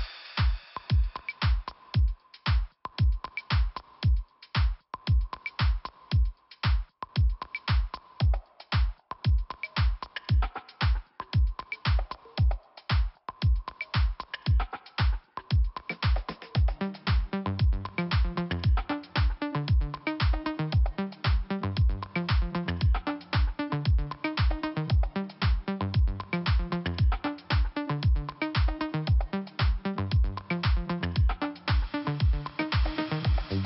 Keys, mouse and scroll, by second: 0.1 click, 3.2 click, 5.0 click, 6.8 click, 7.8 click, 7.8 click, 8.2 click, 11.4 click, 12.4 scroll down 1, 13.1 scroll up 1, 14.9 click, 15.0 click, 15.9 click, 16.0 click, 16.7 click, 16.8 click, 17.6 click, 19.3 click, 19.7 click, 19.8 double click, 20.8 double click, 20.9 double click, 23.0 click, 23.2 click, 24.0 click, 24.2 click, 24.7 click, 25.4 click, 27.1 scroll down 1, 27.8 scroll up 1, 28.2 scroll down 1, 28.5 click, 30.6 click, 30.8 click, 31.8 click.